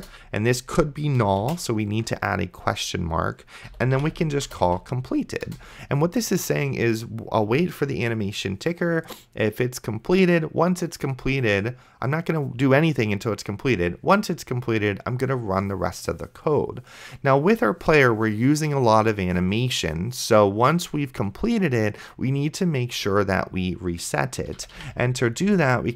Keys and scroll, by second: 0.0-0.2 typing, 1.7 shift+/, 3.4-5.2 typing, 5.5 Return, 24.3-25.4 typing, 25.5 Return.